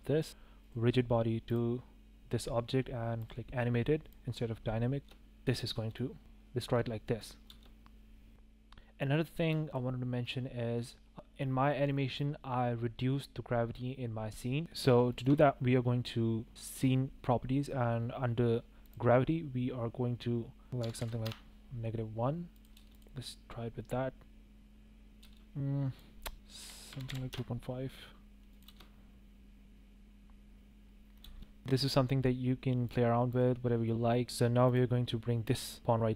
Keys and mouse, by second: 0.1 click, 0.5 click, 1.4-2.0 drag, 3.1 click, 3.9 click, 5.0-6.2 typing, 7.8 space, 8.3 space, 9.5 space, 10.1 click, 15.1 shift+click, 18.9 click, 20.7 click, 20.7 space, 22.5 click, 22.7 space, 22.9 click, 25.2 space, 25.9-27.3 drag, 28.5 click, 28.6 space, 31.0 click, 31.2 space, 33.3 click, 34.2 space.